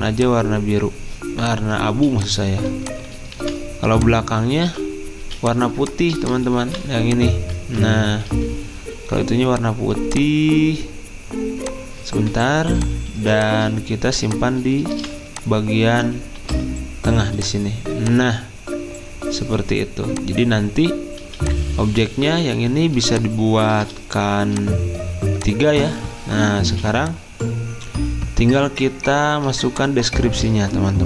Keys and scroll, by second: 1.9 z, 4.3-5.2 typing, 7.7 ctrl+z, 8.3 d, 12.2-13.6 typing, 16.4 ctrl+g, 16.4 typing, 21.2 z, 23.5 z, 26.7 v, 29.5 F10.